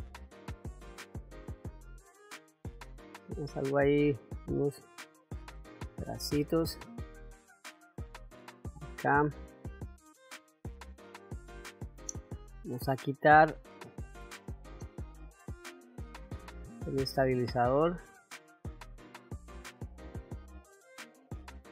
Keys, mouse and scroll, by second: 0.4 click, 0.6-1.7 drag, 2.4 click, 3.1 click, 4.2 click, 4.8 middle click, 5.8 middle click, 7.1 click, 8.4 f, 9.6 click, 10.4 click, 14.1-15.2 drag, 15.8 click, 17.2 click, 17.9 click, 18.8 f, 19.3 click, 19.6 click, 20.2 click, 20.4 click, 20.7 click, 20.8 middle click, 21.1 click, 21.5 middle click.